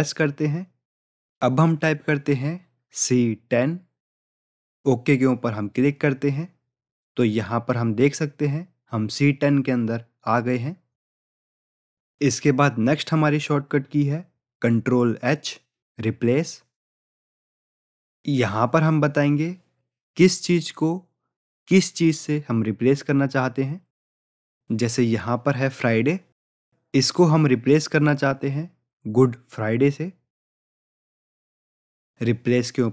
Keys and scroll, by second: 17.0 ctrl+h.